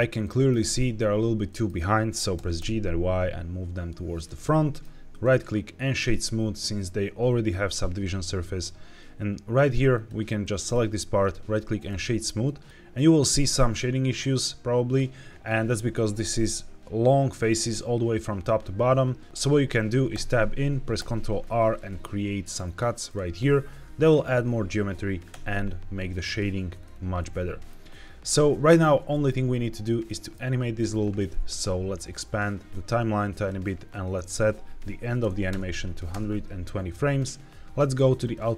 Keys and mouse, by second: 0.1 middle click, 1.3 middle click, 2.2 g, 2.5 y, 4.0 drag, 4.3-4.7 middle drag, 5.1-6.0 right drag, 9.8 click, 10.3 middle click, 11.1 right click, 12.3 middle drag, 20.0 Tab, 20.9 ctrl+r, 22.9 click, 25.2 Tab, 27.1-27.5 middle drag, 27.5 middle click, 29.0 shift+middle click, 30.1 shift+middle click, 32.0-33.5 drag, 34.0-36.0 drag, 38.1 click.